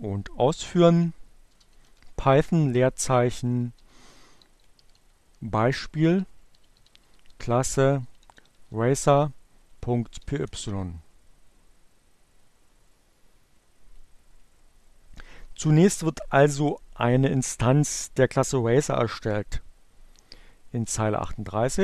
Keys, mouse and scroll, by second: 0.4-10.3 typing, 12.2-14.0 drag, 20.8-21.8 drag.